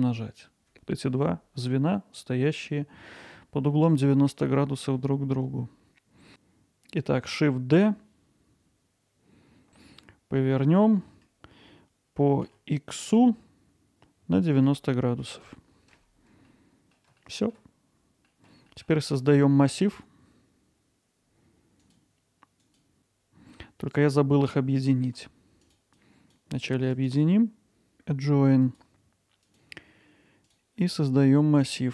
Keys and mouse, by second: 3.1-3.7 middle drag, 4.0-16.3 alt+middle drag, 16.5-16.9 alt+middle drag, 17.2 ctrl+alt+middle click, 18.3 middle click, 18.7 middle drag, 21.5-22.2 drag, 25.7 drag, 26.1 drag, 27.1-28.8 right drag, 30.5-31.9 drag.